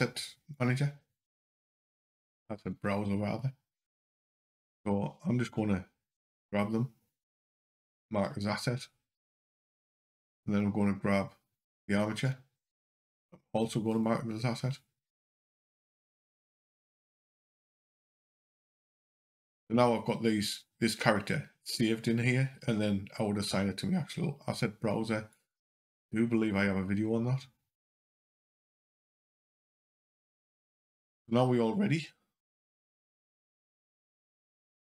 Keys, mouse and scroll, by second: 0.4 click, 6.1 right click, 12.1 click, 13.7 right click, 18.0 click, 18.8 click, 27.6 click, 32.6 click.